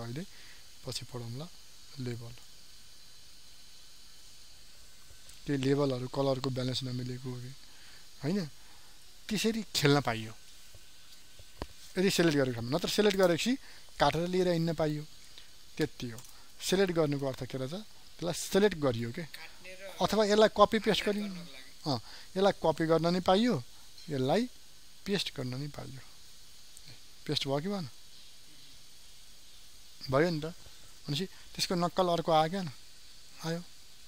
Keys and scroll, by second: 16.1 ctrl+d, 17.8 ctrl+alt+z.